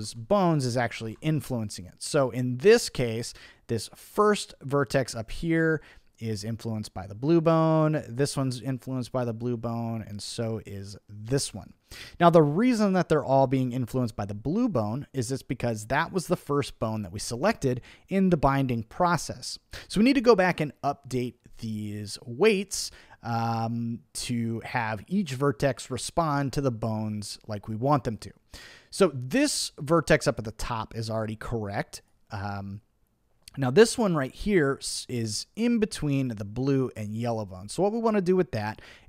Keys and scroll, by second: 1.0 super+z.